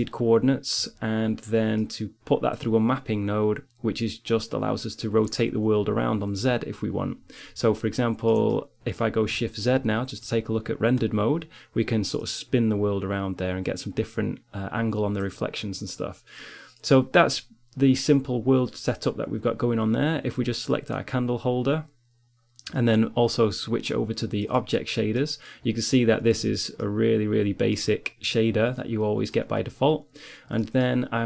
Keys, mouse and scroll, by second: 2.0-4.1 drag, 7.4 middle click, 7.6 click, 9.4 shift+z, 16.1-17.7 drag, 20.5-22.7 drag, 24.8 click, 25.4-26.6 middle drag, 28.1-30.4 drag.